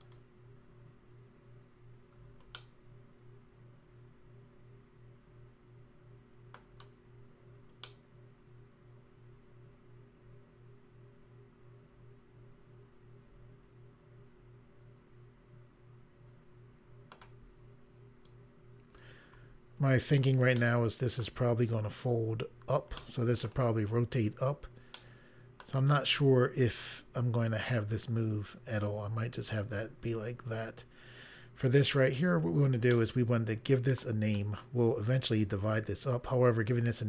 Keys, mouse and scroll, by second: 2.5 middle click, 7.8 middle click, 18.2 click, 19.8 scroll down 1, 20.5 middle click, 22.9 middle click, 24.9 middle click, 32.1 click, 32.9 middle click.